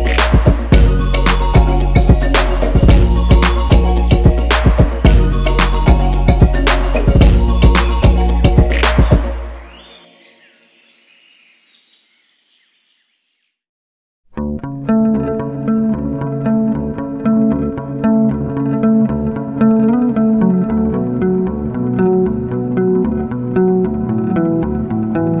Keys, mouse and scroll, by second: 1.1-1.5 scroll down 4, 1.8 g, 4.1 scroll up 7, 4.6-8.8 middle drag, 8.8-10.2 drag, 14.2 scroll up 3, 14.4-14.7 middle drag, 14.8-19.9 middle drag, 19.9-20.4 drag, 20.4-21.0 middle drag, 21.0 scroll up 3, 21.2-21.6 scroll down 4, 21.3 click, 21.6 shift+middle click, 21.9-25.1 drag, 25.1 shift+middle click, 25.3-25.4 scroll up 4.